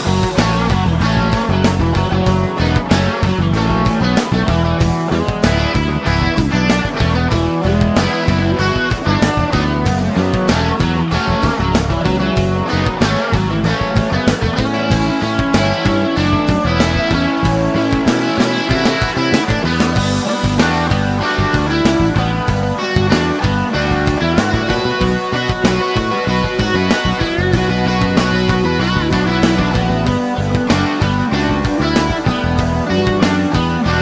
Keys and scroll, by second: 3.4 Return.